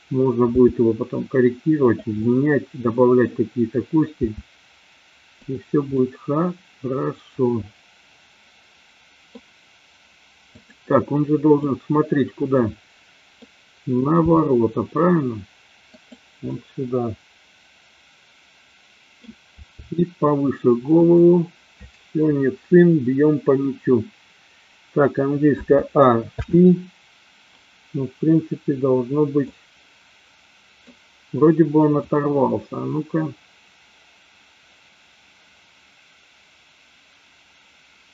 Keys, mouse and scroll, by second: 0.6 r, 2.0 click, 2.1-3.2 middle drag, 4.2 r, 6.0-9.4 middle drag, 10.5 click, 11.6-13.5 middle drag, 14.2 r, 16.2 drag, 16.5-19.4 middle drag, 19.6 r, 25.6 a, 26.5 i, 29.5-30.9 middle drag, 32.2-38.1 drag.